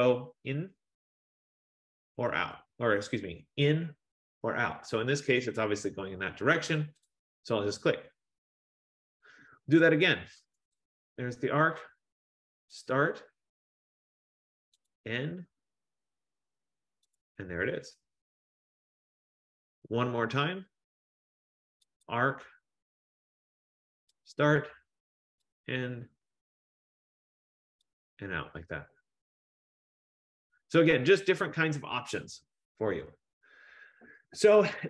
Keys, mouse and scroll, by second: 7.2 click, 10.8 click, 12.9 click, 15.0 click, 17.3 click, 18.7-19.3 scroll, 19.7-20.0 scroll, 22.1 click, 24.4 click, 25.6 click, 28.1 click, 32.3 scroll.